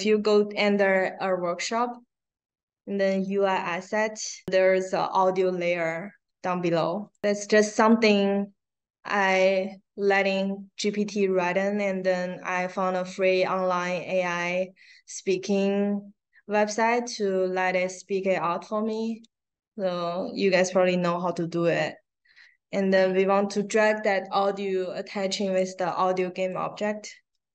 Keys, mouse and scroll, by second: 3.1 click, 7.0 click, 7.1 click, 18.9-25.5 drag, 26.3 click.